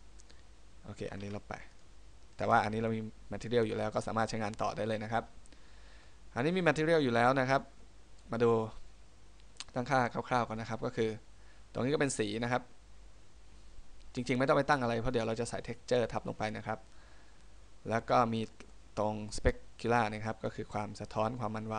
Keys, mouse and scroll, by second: 0.5 right click, 1.4 x, 2.5 right click, 6.2 middle click, 7.8 middle click, 10.7 middle click, 12.5 click, 18.8 middle click.